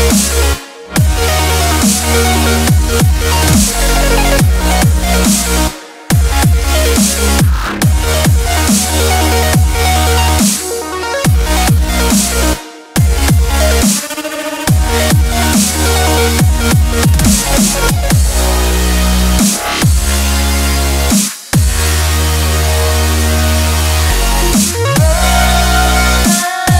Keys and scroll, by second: 8.0 ctrl+a, 8.6 ctrl+c, 14.1 ctrl+v.